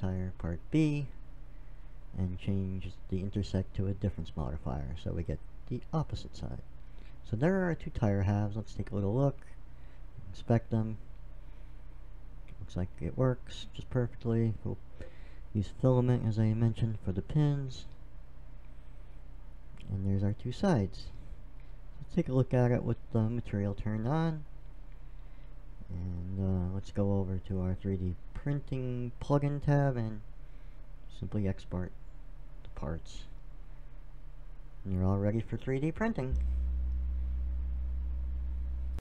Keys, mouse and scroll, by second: 3.0-4.8 drag, 5.9 middle click, 7.2 middle click, 8.2 middle click, 8.8 click, 9.2 middle click, 12.7-14.5 middle drag, 16.6-18.2 middle drag, 20.3-21.7 drag, 22.8 click, 23.4-25.3 middle drag, 27.4-29.1 drag, 31.0 middle click, 33.6-34.9 right drag.